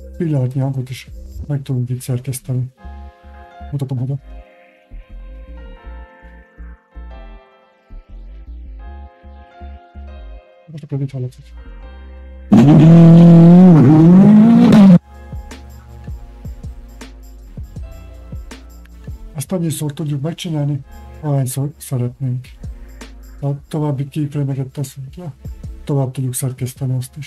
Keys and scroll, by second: 18.9 alt+f.